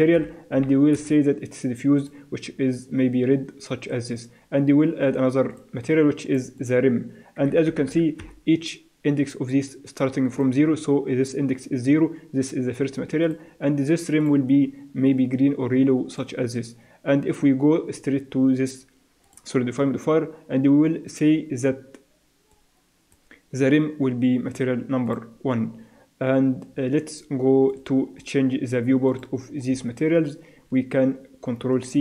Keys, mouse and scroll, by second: 0.1 click, 2.0-3.8 drag, 5.5-8.4 drag, 10.3-12.1 drag, 13.3-16.2 drag, 19.3-21.1 drag, 22.5-24.3 drag, 25.1-26.9 drag, 27.7-30.9 drag, 30.9 middle click, 31.9 ctrl+c.